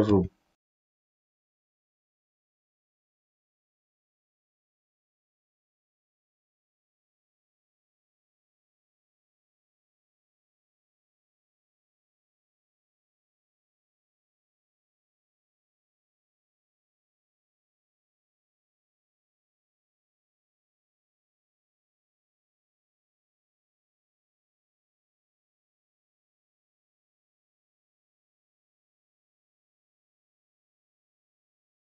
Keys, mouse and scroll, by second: 0.0-16.3 typing, 0.6 middle click, 1.0 middle click, 1.4 middle click, 1.6 click, 1.8 middle click, 2.4 middle click, 3.0 middle click, 3.1 shift+middle click, 4.1 middle click, 4.4 middle click, 4.8 click, 4.8 middle click, 5.3 middle click, 6.3 middle click, 6.8 middle click, 7.0 middle click, 7.3 click, 7.4 middle click, 7.7 middle click, 8.4 middle click, 8.7 middle click, 9.0 click, 9.1 middle click, 9.7 middle click, 10.2 middle click, 10.4 middle click, 11.1 middle click, 12.1 middle click, 12.9 middle click, 13.3 middle click, 13.4 middle click, 13.6 click, 13.9 click, 14.6 middle click, 14.9 click, 15.1 click, 15.3 middle click, 16.1 click, 16.4 click, 16.8 middle click, 17.0 middle click, 17.5 middle click, 17.7-23.6 typing, 17.9 click, 18.0 click, 18.2 middle click, 18.7 middle click, 19.2 middle click, 19.5 middle click, 20.8 middle click, 21.2 click, 21.3 middle click, 21.8 middle click, 21.9 middle click, 22.4 middle click, 22.8 middle click, 23.1 click, 23.3 middle click, 23.7 click, 23.7 middle click, 24.0 click, 24.2 middle click, 24.8-28.5 typing, 25.2 middle click, 25.4 middle click, 25.7 middle click, 25.9 click, 26.0 middle click, 26.5 middle click, 26.6 middle click, 26.8 middle click, 27.1 middle click, 27.3 middle click, 27.9 middle click, 28.1 click, 28.7 middle click, 29.0 click, 29.6 click, 29.8-31.9 typing, 29.9 middle click, 30.2 click, 30.6 click, 31.5 middle drag.